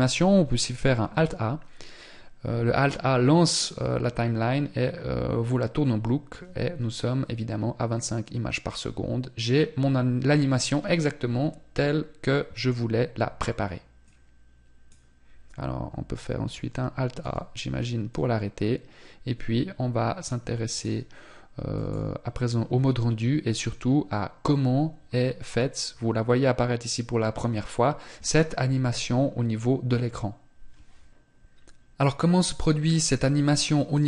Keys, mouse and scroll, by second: 13.3 click.